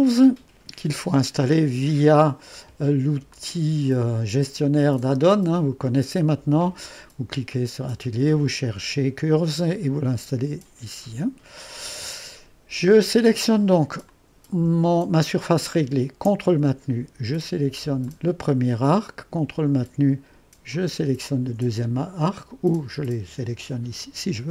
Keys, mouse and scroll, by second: 3.3-9.4 drag, 11.6-24.4 drag.